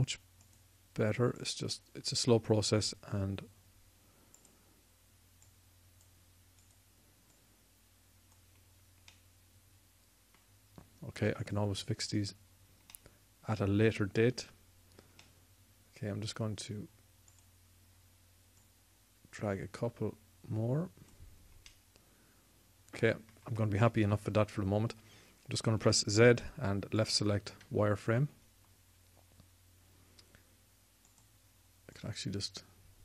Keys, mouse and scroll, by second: 1.2-4.3 drag, 10.0-12.2 middle drag, 12.2-13.8 drag, 13.8-15.0 middle drag, 18.0-21.0 drag, 24.8 KP_1, 26.5 z.